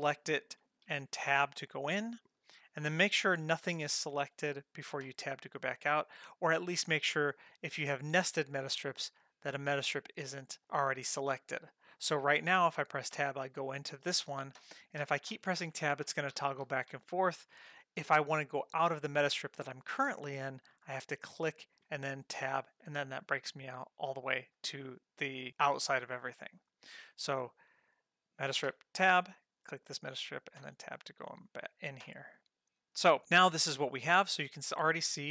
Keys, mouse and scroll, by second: 0.2 click, 0.9 Tab, 3.6 click, 5.0 Tab, 13.1 Tab, 14.6 Tab, 15.0 Tab, 15.3 Tab, 15.6 Tab, 15.8 Tab, 16.1 Tab, 16.3 Tab, 16.6 Tab, 16.9 Tab, 21.2 click, 21.8 Tab, 26.8 click, 28.6 Tab, 29.3 click, 30.6 Tab, 32.0 Tab, 33.1 click, 33.4-34.0 scroll up 3.